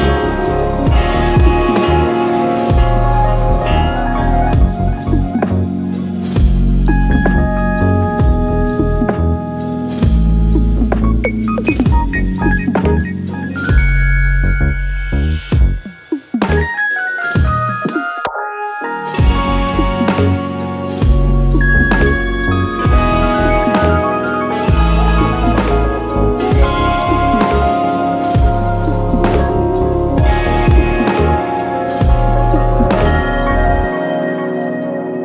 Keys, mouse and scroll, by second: 2.9 middle click, 18.1 click, 18.8 middle click, 21.3-24.7 middle drag, 24.7-25.3 scroll down 2, 26.1 drag, 27.2 middle drag, 27.9 middle drag, 28.3-28.9 middle drag, 29.5 middle drag, 31.5 middle drag, 32.7-33.7 middle drag, 34.1 scroll up 1, 34.6 middle drag, 35.1 middle click.